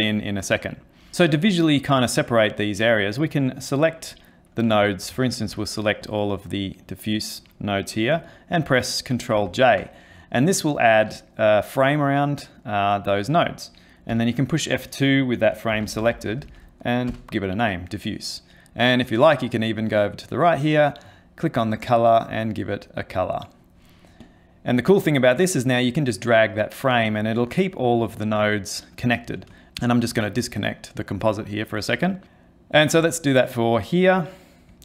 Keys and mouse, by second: 1.1 middle click, 1.1 ctrl+middle click, 1.5 click, 4.1 click, 4.8 ctrl+middle click, 5.2 shift+middle click, 5.6 ctrl+middle click, 6.0 click, 9.4 ctrl+j, 14.1 F2, 16.1 f, 20.0 click, 21.7 click, 22.4 click, 24.2 click, 25.2 click, 27.5 click, 28.5 click, 29.9 ctrl+right click, 30.4 middle click, 31.2 click, 32.3 middle click, 33.0 click.